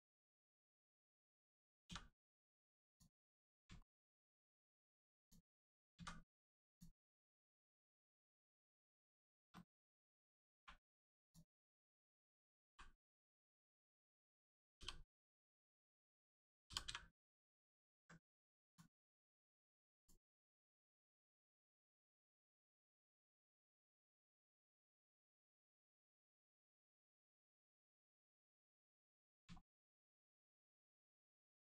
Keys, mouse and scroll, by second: 0.6 2, 0.9 click, 3.4 scroll down 1, 3.8 shift+middle click, 5.2 middle click, 5.9 x, 6.6 click, 8.4 shift+middle click, 8.8 scroll up 1, 9.1 shift+middle click, 9.5 middle click, 11.2 click, 11.8 middle click, 13.8 right click, 14.7 g, 15.0 middle click, 15.7 right click, 16.8 y, 18.7 click, 19.1 middle click, 19.9 click, 20.4 Tab, 20.9 scroll down 1, 21.1 middle click, 23.3 shift+middle click, 23.7 scroll down 1, 24.0 shift+middle click, 24.3 middle click, 24.3 middle click, 24.8 scroll up 1, 25.5 click, 25.8 shift+middle click, 26.0 middle click, 28.3 Tab, 28.9 middle click, 29.3 scroll up 1, 29.6 shift+middle click, 29.9 middle click, 29.9 middle click, 30.4 shift+middle click, 30.7 middle click, 30.8 middle click, 31.1 scroll up 1, 31.5 shift+middle click.